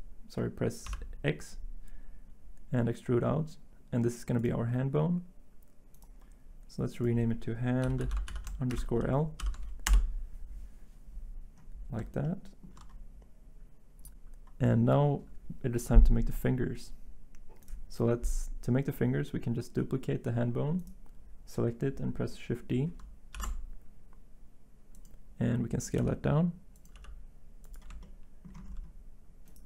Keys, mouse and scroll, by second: 0.8 x, 7.8-9.4 typing, 9.9 Return, 23.3 d, 26.0 s, 26.9 g.